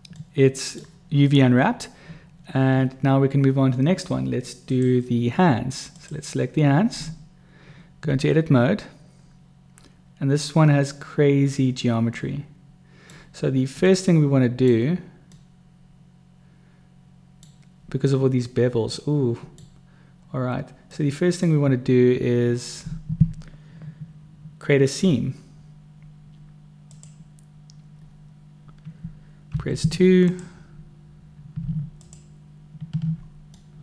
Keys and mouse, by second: 0.2-0.8 middle drag, 4.6 click, 4.7 right click, 5.9 right click, 7.0 Tab, 12.2 click, 12.2 right click, 12.4 middle click, 13.9 middle click, 15.3-17.5 middle drag, 19.0 middle click, 20.9 middle click, 26.8 click, 29.5 2, 31.6 typing, 31.9 alt+click, 33.6 middle click.